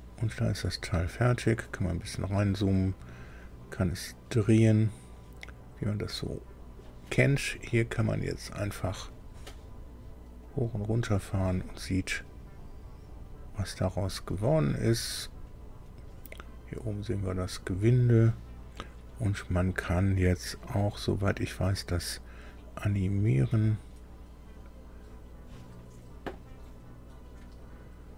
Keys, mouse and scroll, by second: 0.3-0.9 scroll up 2, 1.6 scroll down 2, 3.4-6.8 drag, 8.4 click, 10.4-18.1 drag, 23.6 click.